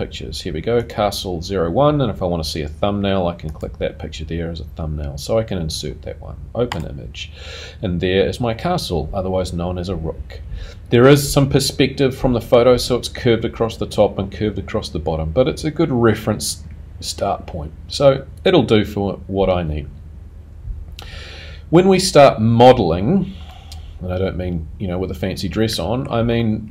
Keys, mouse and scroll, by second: 23.5 middle click, 26.3 middle click.